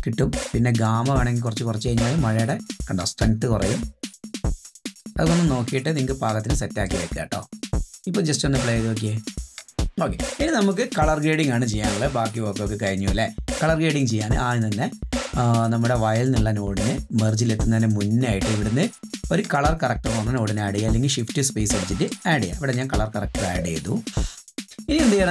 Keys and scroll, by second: 7.5 space, 9.7 space.